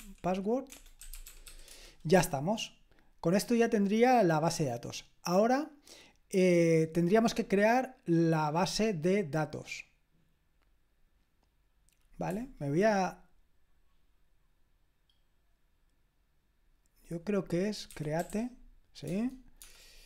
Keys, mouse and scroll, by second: 0.0-1.4 typing, 1.7 Return, 17.9-20.0 typing, 19.0 Tab.